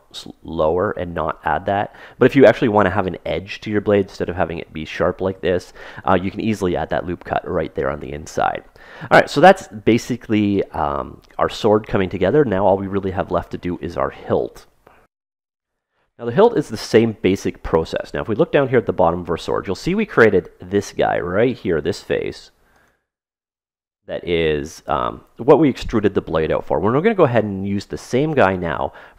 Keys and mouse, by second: 0.4 ctrl+z, 1.1-3.8 middle drag, 8.8-10.8 middle drag, 17.0 middle click, 17.7-19.3 middle drag, 20.4 right click, 21.7 ctrl+Tab, 23.3 right click.